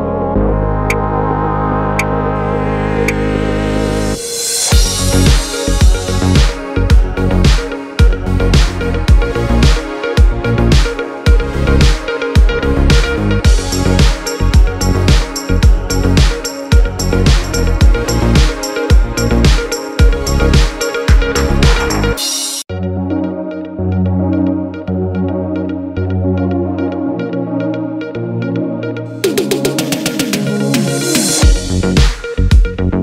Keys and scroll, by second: 22.1 d, 23.5 u.